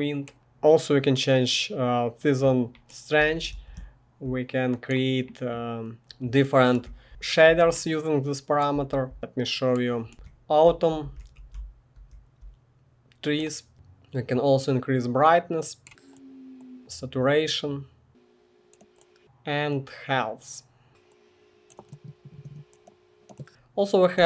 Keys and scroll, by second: 2.9-4.4 typing, 6.6-7.5 typing, 8.7-12.1 typing, 21.6-24.2 typing.